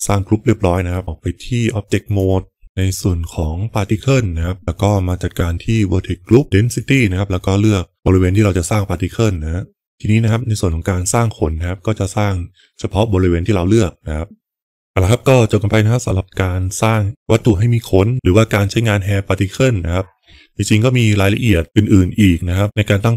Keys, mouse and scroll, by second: 1.0 Tab, 2.7 click, 4.8 click, 6.7-9.4 drag.